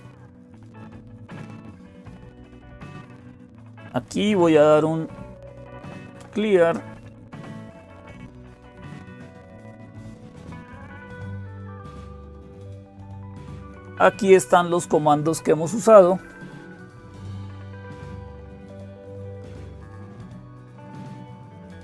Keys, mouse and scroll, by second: 0.0-21.8 typing, 0.0 click, 2.3-3.7 drag, 7.6 ctrl+-, 8.5 ctrl+-, 8.9 ctrl+-, 9.2 ctrl+-, 9.4 ctrl+-, 11.5 Return, 18.6 ctrl++.